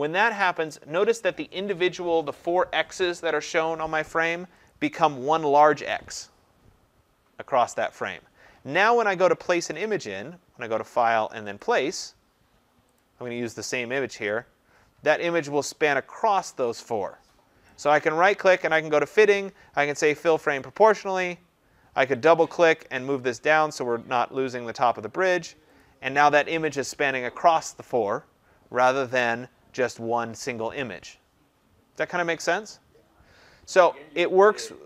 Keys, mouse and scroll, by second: 4.7 click, 9.7 click, 11.6 click, 17.8 right click, 20.6 click, 22.2 click, 22.4 click, 23.5 click, 24.7 click, 34.6 click.